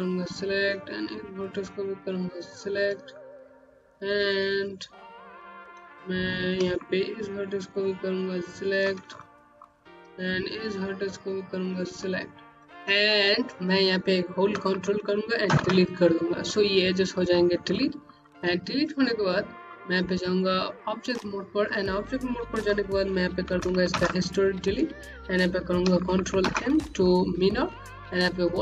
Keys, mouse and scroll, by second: 0.0 shift+click, 2.4 shift+click, 2.9-3.2 scroll down 1, 3.4 click, 3.7 Home, 8.3 click, 11.2 click, 12.6 alt+middle click, 15.3 ctrl+Delete, 16.7 scroll down 1, 17.7 middle click, 18.6 scroll down 1, 18.9 alt+click, 19.9 right click, 23.8 d, 26.3 ctrl+m, 28.2 click.